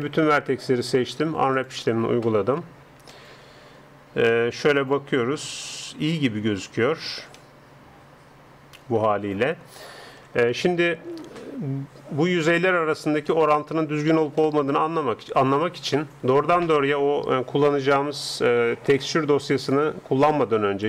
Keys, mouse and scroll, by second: 0.1 a, 0.3 a, 1.1 u, 2.4-18.8 middle drag, 19.0 ctrl+s.